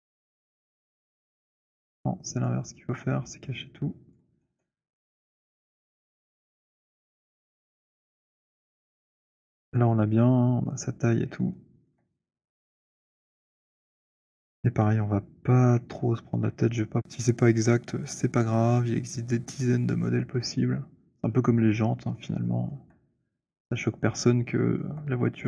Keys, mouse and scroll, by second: 0.5 click, 2.6 click, 3.2 click, 4.4 alt+click, 6.4-7.3 scroll, 7.3-9.2 scroll, 9.8 alt+middle click, 11.3-11.7 alt+scroll, 12.1 alt+scroll, 16.0 shift+right click, 16.4-16.8 scroll, 21.0 click, 21.6-22.0 scroll, 22.5-23.2 alt+scroll, 23.8 alt+middle click, 23.8-24.7 alt+scroll, 24.8 alt+middle click, 24.8 alt+scroll.